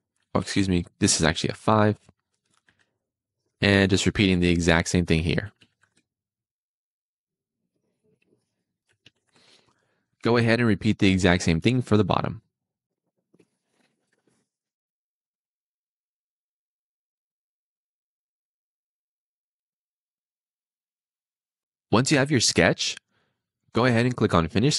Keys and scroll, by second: 0.3 Escape, 1.5 5, 1.6 Return, 2.7 d, 5.4 4, 5.6 ., 5.8 Return, 8.8 4, 9.0 ., 9.2 5, 9.4 Return, 14.0 d, 14.4 Return, 14.5 d, 15.2 Return, 16.0 Return, 17.1 5, 17.2 Return, 17.5 super+z, 18.8 Return, 18.9 d, 19.6 4, 19.8 Return, 20.5 4, 20.7 Return, 20.9 Escape.